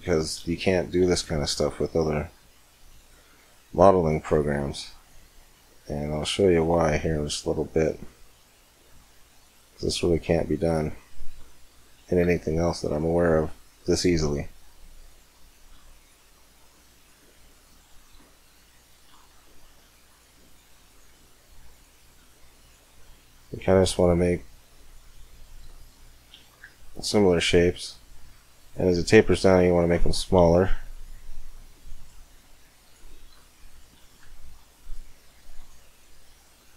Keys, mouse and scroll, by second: 0.8 c, 6.0-8.0 right drag, 6.3-9.1 drag, 7.8 c, 11.1 right click, 11.5 middle click, 11.8 right click, 12.1 c, 18.3 middle click, 19.1 c, 25.4-27.3 middle drag, 26.4 c, 33.0 middle click, 33.1 right click, 33.3 middle click, 34.1 c.